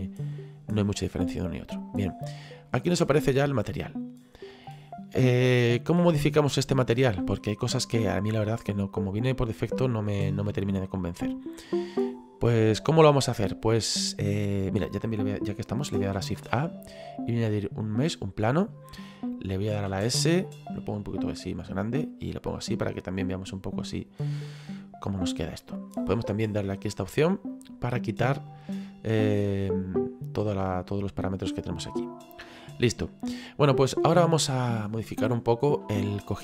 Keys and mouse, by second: 2.7 middle click, 5.2 middle click, 7.0 middle click, 8.8 middle click, 12.9 middle click, 17.3 click, 21.1 click, 27.5 click, 29.5 click, 31.4 click, 34.5 middle click.